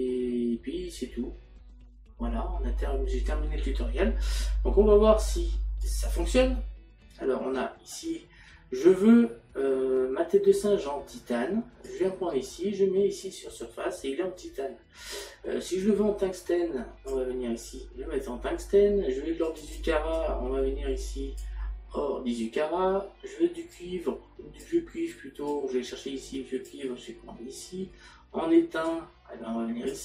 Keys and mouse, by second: 5.9 click, 15.8 click, 19.5 click, 23.8 click, 25.5 click, 28.9 click.